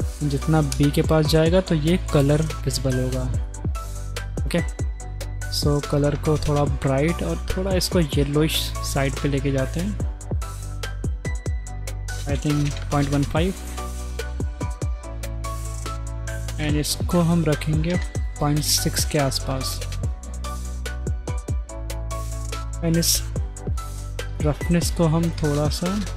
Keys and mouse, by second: 0.7 click, 3.4 click, 14.9 drag, 15.5 click, 17.0-18.0 drag, 19.8 click, 20.4-22.5 middle drag, 24.3 click.